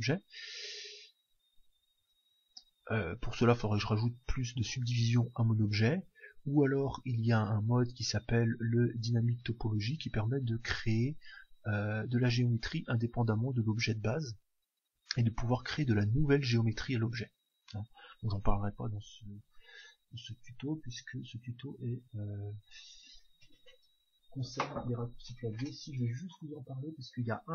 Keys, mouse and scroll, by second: 1.5-7.5 middle drag, 7.5-10.8 drag, 11.2-13.1 drag.